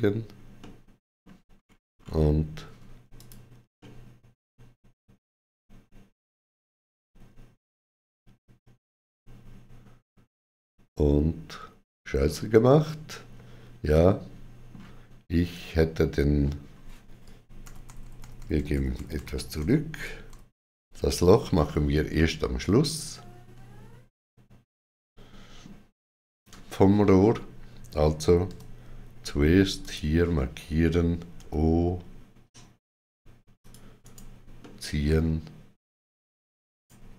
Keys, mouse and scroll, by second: 0.4 middle click, 1.4-1.9 scroll up 3, 3.0 click, 3.9 middle click, 13.7 middle click, 17.0 middle click, 17.0 click, 17.5 ctrl+z, 22.0 middle click, 28.3 KP_1, 29.7 click, 31.2 o, 33.4 click, 33.4 o, 33.9 right click, 34.4 middle click, 36.5 right click.